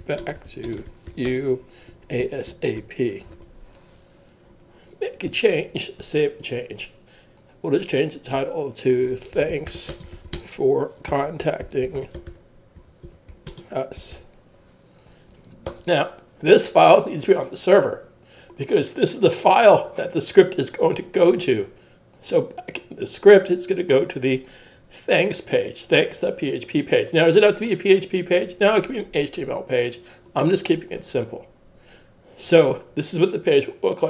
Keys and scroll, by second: 0.0-3.7 typing, 6.0 super+s, 8.8-16.2 typing.